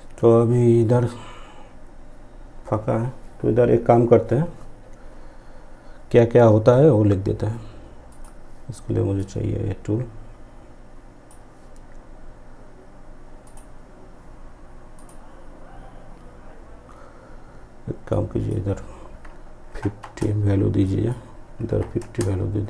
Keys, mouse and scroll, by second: 7.1-12.4 drag, 17.1-19.9 drag, 19.9 click.